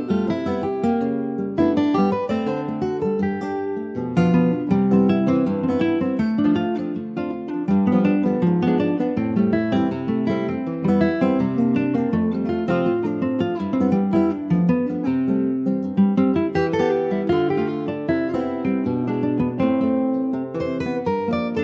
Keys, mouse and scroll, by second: 1.0 click, 1.5 ctrl+s, 1.9 alt+z, 2.3 ctrl+s, 2.5 middle click, 3.1 ctrl+s, 3.2 click, 3.5 middle click, 4.1 s, 6.9 middle click, 7.2-8.1 scroll up 1, 8.1 click, 9.6-11.2 middle drag, 11.2 scroll up 1, 11.4 ctrl+s, 12.0 click, 13.0 click, 13.4 middle click, 13.8 ctrl+s, 14.1 shift+middle click, 14.6 click, 14.7 Tab, 15.3 Tab, 15.6 click, 16.0 ctrl+a, 16.8 middle click, 17.2 Tab, 17.9 click, 18.7 Tab, 18.9 click, 19.4 Tab, 20.3 2, 20.6 click, 20.8-21.6 middle drag.